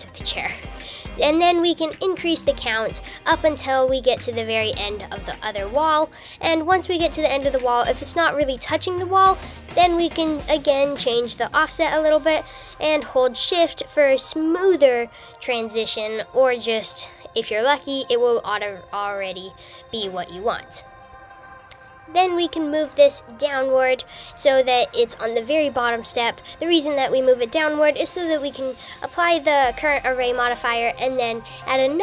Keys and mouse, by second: 3.0 click, 3.3 click, 3.5 click, 7.5 click, 8.1 click, 11.4 click, 13.1 click, 14.0-21.1 drag, 21.3 KP_3, 22.1 g, 31.8 g.